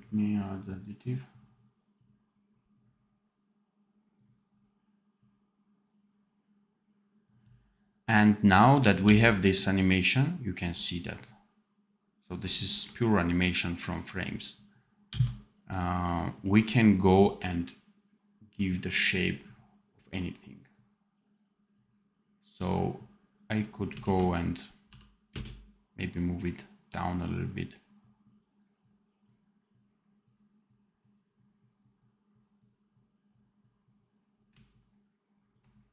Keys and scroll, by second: 8.9 d, 15.0 d, 23.9 ctrl+z, 24.8 v, 25.2 space.